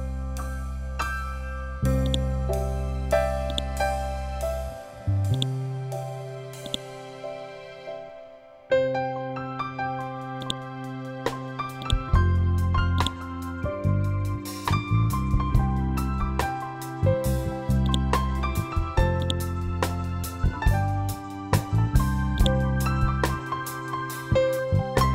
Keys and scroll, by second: 13.9 F12, 15.5 7, 15.7 5, 16.1 Return, 23.5 ctrl+g.